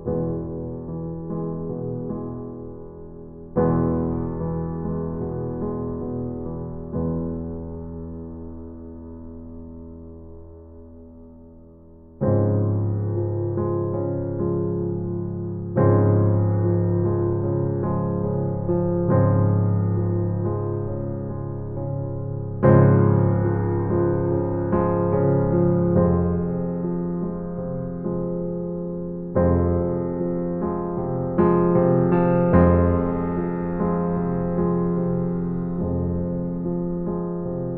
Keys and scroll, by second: 0.1 Right, 1.4 Right, 3.2 Right, 4.5 Right, 6.0 Right, 7.5 Right, 8.8 Right, 10.3 Right, 11.6 Right, 14.1 Right, 19.6 Right, 20.9 Right, 24.1 Right.